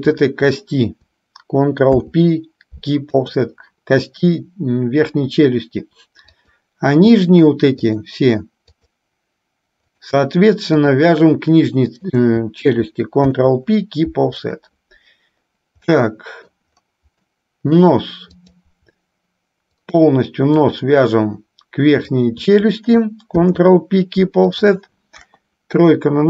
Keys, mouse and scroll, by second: 0.0 shift+click, 1.9 ctrl+p, 4.4-5.8 middle drag, 6.5-7.5 drag, 8.2 shift+click, 12.2 shift+click, 13.5 ctrl+p, 16.2 middle click, 17.5 middle click, 18.7 click, 20.0-21.2 shift+drag, 22.3 shift+click, 23.7 ctrl+p, 25.4 KP_1.